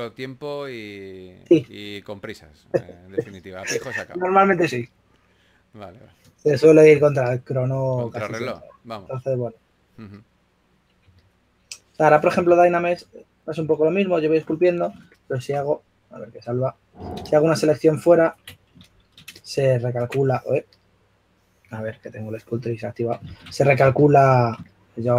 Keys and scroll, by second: 2.1 s, 8.6 s, 10.7-11.5 typing, 23.5 shift+f.